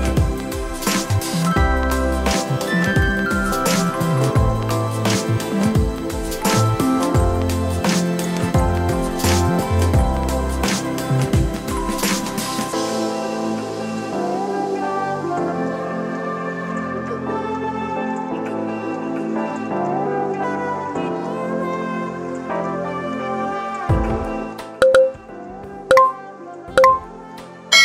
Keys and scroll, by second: 3.6 x, 5.9 ctrl+r, 7.9 Tab, 8.9 ctrl+a, 10.5 shift+a.